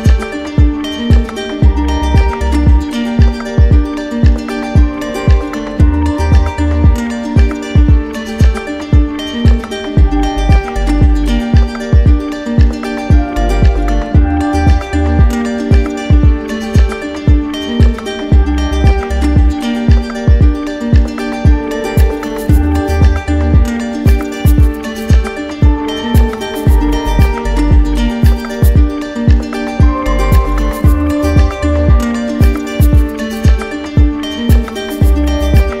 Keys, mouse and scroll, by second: 1.1 click, 2.7 right click, 4.1 click, 4.4 ctrl+z, 6.9 click, 9.7 click, 11.1 d, 13.3 right click, 14.8 click, 15.7 click, 17.9 click, 19.1 click, 20.2 right click, 20.8 shift+click, 29.9 shift+click, 30.9 right click, 33.9 click, 35.4 click.